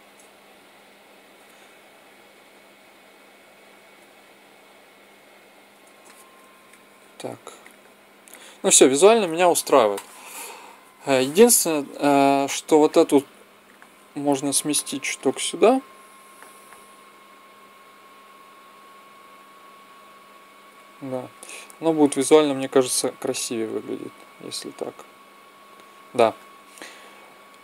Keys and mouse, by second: 0.4 Up, 0.6 Up, 1.5 g, 7.6-12.8 drag, 12.9-16.9 drag, 14.4 right click, 15.1 right click, 16.9 middle click, 17.4-19.3 drag, 22.1-23.9 drag.